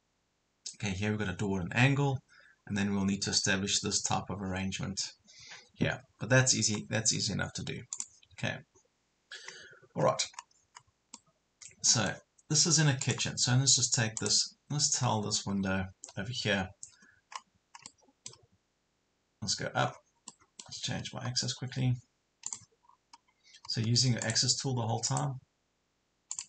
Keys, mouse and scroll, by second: 9.6 scroll down 1, 10.0 scroll up 1, 11.1 middle click, 12.1 scroll up 1, 13.1 click, 15.5 scroll down 1, 17.3 scroll up 1, 17.9-18.9 middle drag, 19.9 scroll down 1, 20.3 middle click, 22.5 click, 22.9 scroll up 1, 24.3 click.